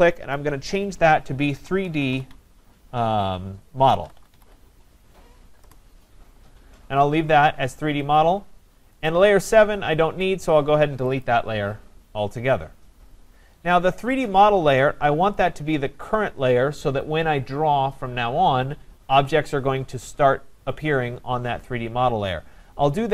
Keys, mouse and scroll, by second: 0.4 click, 1.6 3, 2.1 shift+d, 3.5-4.9 typing, 5.6 Return, 9.1 click, 11.2 click.